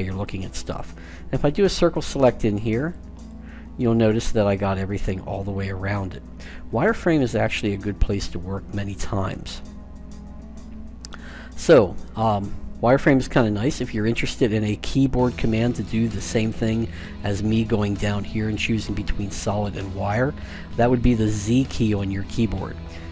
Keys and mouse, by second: 1.1 c, 3.4-5.3 middle drag, 7.7 KP_1, 9.6 KP_5, 12.4 a, 16.4-18.2 drag, 21.1 z, 22.6-23.1 typing.